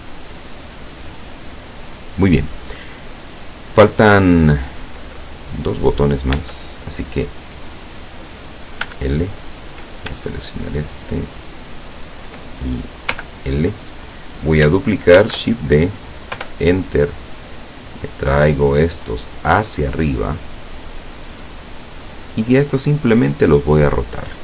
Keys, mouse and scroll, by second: 1.0-1.6 scroll up 2, 4.1-4.4 scroll down 2, 6.4 Tab, 8.9 l, 11.6 shift+right click, 13.2 l, 15.2 shift+d, 16.5 Return, 17.7-21.7 drag.